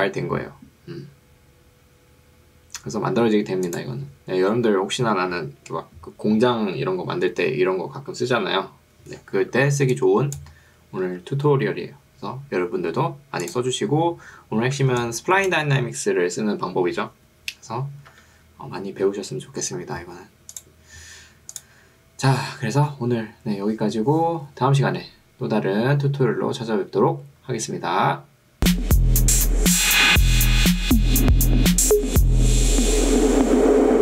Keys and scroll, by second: 9.8 ctrl+2, 11.2 Escape, 15.0 ctrl+2, 18.2 Escape.